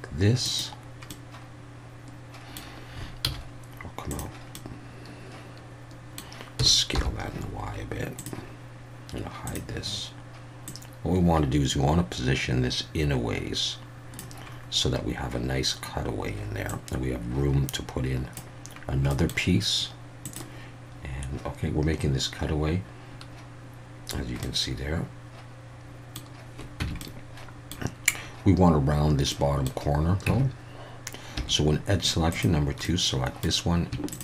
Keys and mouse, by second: 0.4 click, 1.2-2.5 middle drag, 3.2 z, 4.6-6.2 middle drag, 6.6 s, 6.9 y, 8.1 click, 9.5 click, 10.7-14.2 drag, 16.7-18.3 drag, 19.1 middle click, 24.6-26.2 middle drag, 26.8 Tab, 27.0-27.7 middle drag, 29.3-29.7 middle drag, 30.3 Tab, 31.4 Tab, 32.8 middle click.